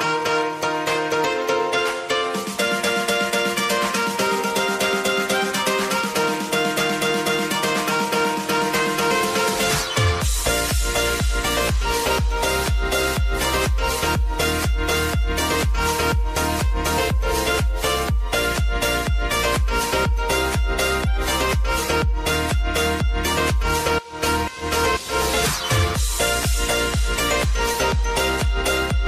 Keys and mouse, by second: 2.0 click, 2.5 space, 4.7-6.6 drag, 6.6 space, 10.3-11.8 drag, 12.0 ctrl+d, 12.3-13.2 typing, 14.0 click, 16.2 -, 16.4 Return, 17.5-19.0 typing, 20.4-24.2 drag, 24.2-27.5 drag, 27.5 space.